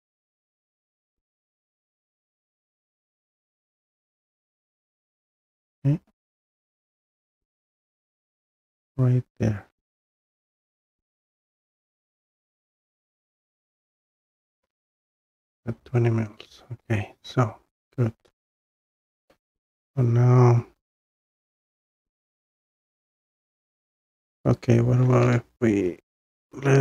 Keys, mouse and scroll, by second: 2.5-6.2 scroll down 3, 6.2 click, 11.2 click, 15.7 Escape, 16.4 middle click, 16.5 middle click, 16.9 middle click, 17.1 middle click, 17.5 middle click, 18.5 middle click, 19.4-19.7 scroll down 6, 22.5 scroll down 1, 24.5-24.9 scroll, 26.3 click.